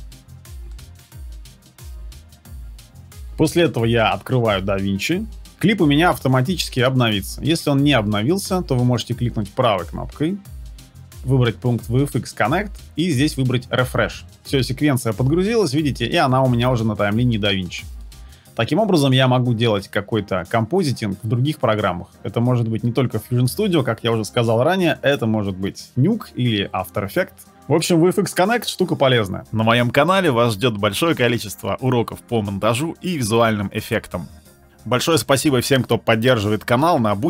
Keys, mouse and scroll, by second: 9.3 right click.